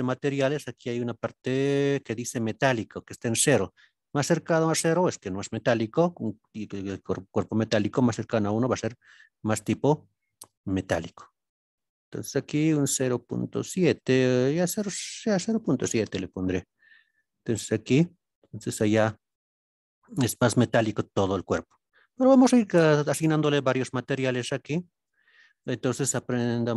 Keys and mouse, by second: 8.5-13.9 drag, 14.5-16.6 drag, 17.2-19.3 middle drag, 19.6-20.6 middle drag, 20.9 middle click, 22.0-23.2 middle drag, 25.0-25.6 drag.